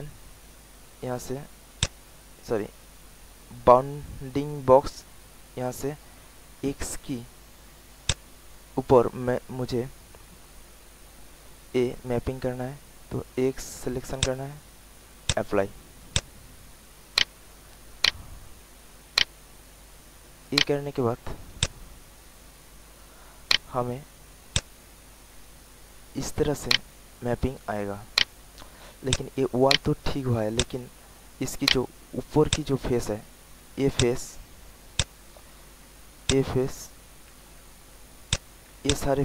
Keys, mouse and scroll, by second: 6.4 alt+middle click, 8.0 alt+click, 14.1 click, 17.1 alt+right click, 17.5 alt+middle click, 18.8 alt+middle click, 19.1 alt+right click, 20.2 alt+middle click, 20.6 alt+right click, 21.5-22.7 drag, 22.9 middle click, 24.4 click, 26.2 alt+middle click, 26.6 alt+right click, 27.6 alt+click, 27.9 alt+click, 28.1 alt+right click, 28.6 alt+middle click, 29.0 alt+click, 29.6 alt+right click, 30.2 alt+middle click, 30.5 alt+click, 31.0 alt+click, 31.7 alt+right click, 32.1 alt+middle click, 32.5 alt+click, 33.9 click, 34.4 alt+middle click, 34.9 alt+click, 36.2 click, 36.9 alt+middle click, 38.2 shift+click, 38.8 alt+shift+click.